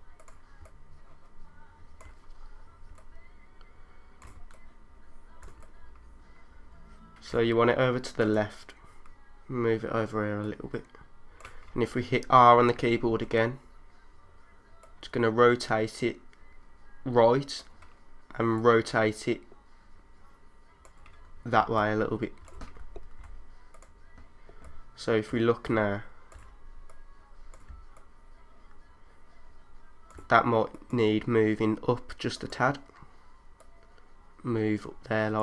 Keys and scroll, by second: 0.6 3, 2.5 3, 4.5-6.1 typing, 13.1 r, 21.7 3, 22.5 3, 22.9 super+z, 24.6 3, 26.5 typing.